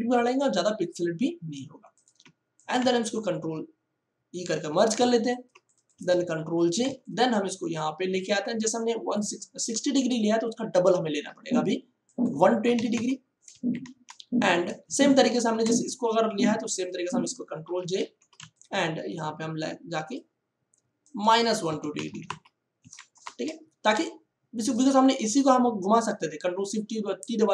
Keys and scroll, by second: 3.3 ctrl+e, 4.4 ctrl+j, 5.0 ctrl+space, 6.3 ctrl+t, 12.6 1, 13.0 2, 13.2 0, 13.4 Return, 14.8 ctrl+space, 15.5 space, 17.6 ctrl+j, 18.0 ctrl+t, 21.6 KP_Subtract, 21.9 1, 22.1 2, 22.3 0, 22.8 Return.